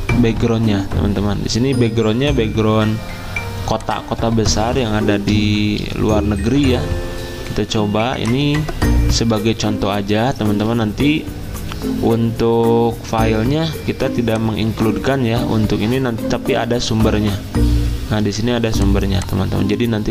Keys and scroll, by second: 9.4 alt+Tab, 10.5 alt+Tab, 17.0 alt+Tab.